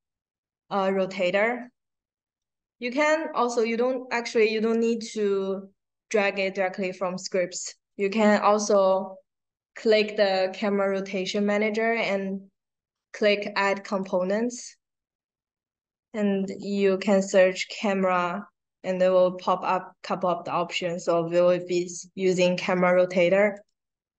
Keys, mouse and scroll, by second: 7.8 click, 8.0 click, 13.8 click, 16.4 a, 23.4 click.